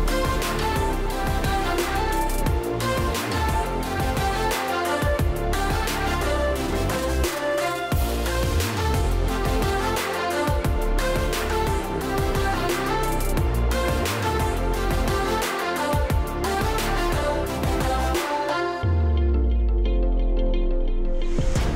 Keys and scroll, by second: 13.3-16.9 typing.